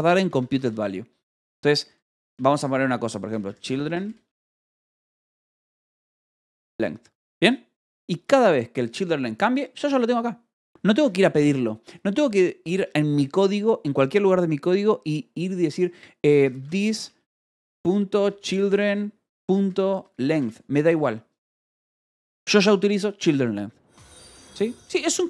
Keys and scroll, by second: 0.0-2.3 typing, 1.3 Escape, 3.6-7.0 typing, 8.2 l, 9.4 h, 11.9 Escape, 13.1 o, 13.9 Return, 16.3-20.8 typing, 22.4 Escape, 23.7 d, 24.0 Escape, 24.6 k.